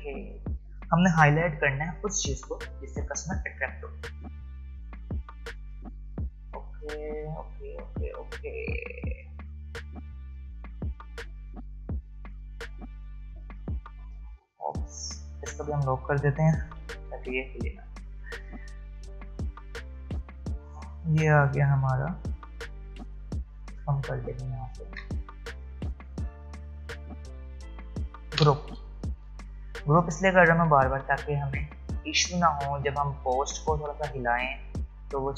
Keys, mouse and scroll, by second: 2.1 alt+scroll up 1, 4.9 shift+click, 9.6 alt+scroll down 1, 11.1-11.5 alt+scroll up 1, 12.4 click, 14.0 ctrl+z, 15.1 click, 16.8 ctrl+2, 19.9 click, 28.3 ctrl+g, 29.8-30.6 alt+scroll down 1, 30.6 alt+scroll up 1, 32.5-32.9 alt+scroll down 1.